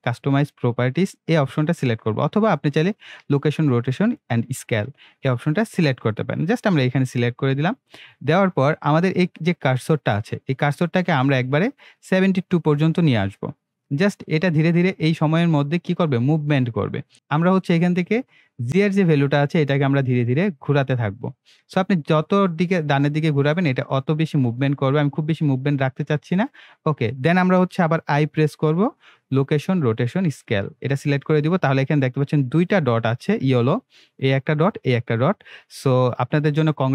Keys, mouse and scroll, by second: 6.6 click, 11.9-15.9 drag, 17.1 ctrl+z, 18.1-28.1 drag, 28.2 i, 30.3 click, 32.6-36.9 drag.